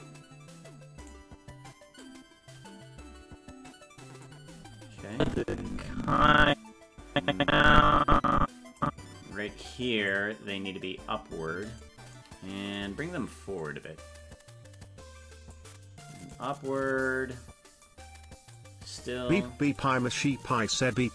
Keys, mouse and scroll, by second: 1.2 right click, 2.0-4.3 drag, 5.1-8.8 drag, 10.1-11.8 drag, 13.6-15.5 drag, 16.3 right click, 18.5-19.8 drag.